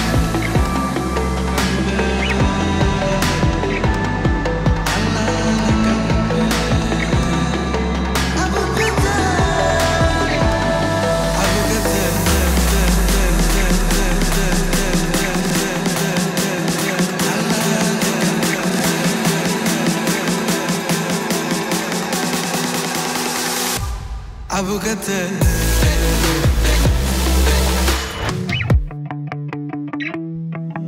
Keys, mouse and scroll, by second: 0.3 space, 3.1-3.7 drag, 11.8 u, 13.0 click, 13.7 1, 13.9 Return, 15.6 click, 20.0-21.6 drag, 22.5 right click, 23.5 click, 25.0 space.